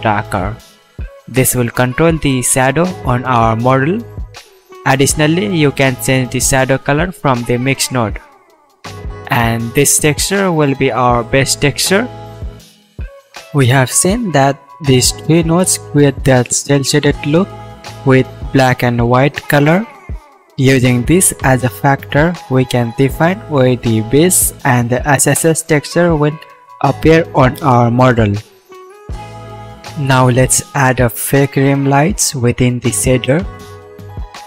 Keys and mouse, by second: 30.5-32.0 drag, 32.2 shift+a.